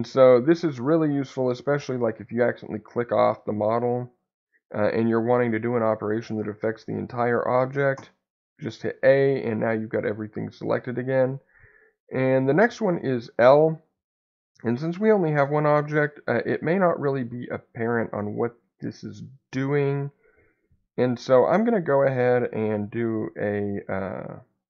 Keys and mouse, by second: 13.7 click, 16.5-19.3 middle drag, 23.0 click.